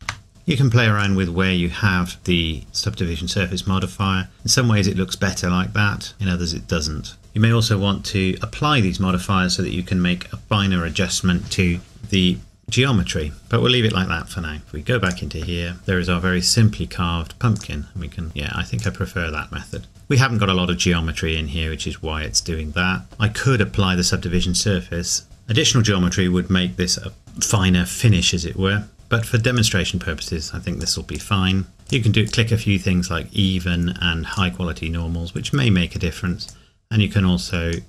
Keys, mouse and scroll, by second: 0.3 middle click, 1.0 click, 4.0 middle click, 4.3 scroll up 1, 5.3 scroll down 1, 13.4 middle click, 15.0 click, 17.6 click, 27.2 middle click, 27.6-28.4 scroll up 1, 28.9 click.